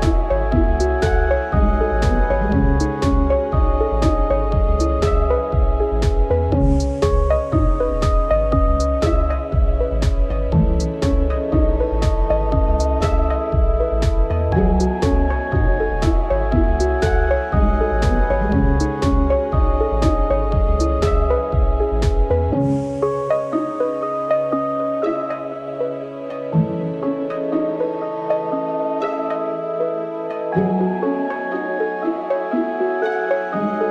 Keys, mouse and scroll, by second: 0.0 right click, 0.1 shift+middle click, 0.5-0.9 scroll down 6, 0.9 Delete, 1.2 right click, 1.3 Tab, 1.7 shift+d, 2.6 KP_1, 2.9 scroll down 2, 3.0 shift+middle click, 3.3 scroll up 1, 3.5 g, 4.0 shift+middle click, 4.6 shift+d, 6.1 Tab, 6.2 scroll down 4, 6.4 middle drag, 6.6 Tab, 7.8 a, 8.1 shift+d, 10.0 Tab, 10.1 right click, 11.9 shift+s, 12.2 scroll down 1, 12.4 right click, 12.7 scroll up 1, 13.0 Tab, 13.4 g, 15.0 r, 18.7-20.0 scroll down 1, 20.0 click, 20.3 r, 25.0 KP_3, 25.5-25.9 scroll up 6, 25.9 g, 27.8 ctrl+KP_3, 28.1 ctrl+KP_1, 28.7 scroll down 7, 29.0 KP_1, 29.1-29.6 scroll up 9, 29.6 g, 30.8 Tab, 30.9-31.4 scroll down 2, 31.1 KP_0, 31.5 right click, 31.9-33.3 scroll up 1, 33.3-33.8 scroll down 1, 33.8 shift+middle click.